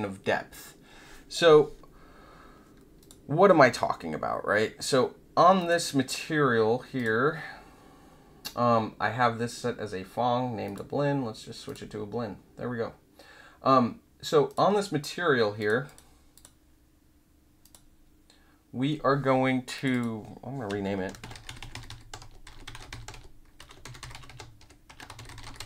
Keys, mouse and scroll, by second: 3.0 click, 5.5 click, 6.9 click, 10.6 click, 11.6 click, 14.4 click, 15.5 click, 15.8 click, 16.3 click, 17.6 click, 19.7 click, 19.9 click, 21.0-25.6 typing.